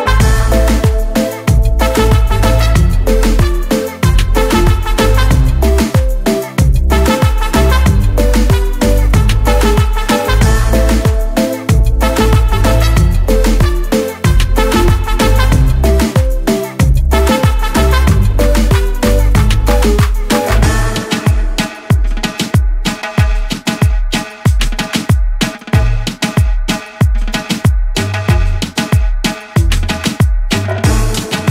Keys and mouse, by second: 3.6 click, 4.8 click, 6.8 click, 9.2 <, 9.3 click, 11.1 click, 12.7 click, 14.4 click, 16.9 click, 18.6 click, 19.8 click, 25.4 click, 26.5 click, 27.6 Down, 29.1 click, 31.1 click.